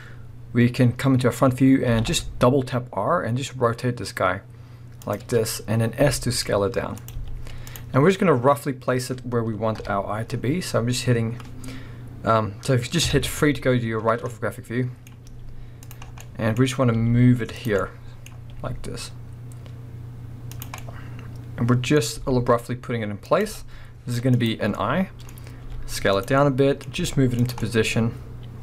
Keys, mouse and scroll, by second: 1.9 r, 5.1 click, 5.8 scroll up 1, 6.0 s, 7.1 click, 7.2 z, 8.1-8.6 middle drag, 8.6-8.9 scroll down 1, 9.8 KP_7, 10.3-13.0 scroll up 1, 13.0 KP_3, 14.0 scroll up 1, 14.3 middle click, 15.2 middle click, 15.2 g, 15.9 click, 16.1 scroll down 1, 16.6-17.0 scroll up 1, 17.0 middle click, 17.0 g, 17.6 click, 17.8-18.3 middle drag, 18.3 scroll up 1, 18.5-20.6 middle drag, 18.5 g, 20.6 click, 20.8-21.9 middle drag, 22.2 r, 23.4 click, 23.5 g, 24.5 click, 24.8 middle click, 25.3 scroll up 1, 25.6 s, 26.2 click, 26.4-27.5 middle drag, 27.0 g, 27.5 click, 27.6-28.6 middle drag.